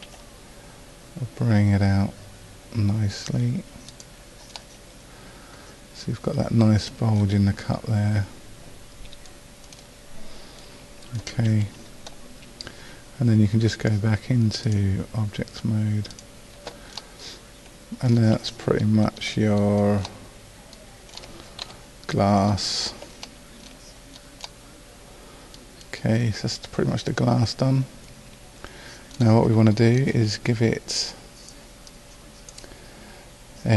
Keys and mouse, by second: 0.1 s, 6.1-9.3 middle drag, 11.5 a, 14.7 click, 19.5 middle click, 21.7 KP_5, 25.9 middle click, 31.9 middle click, 32.1-33.7 drag.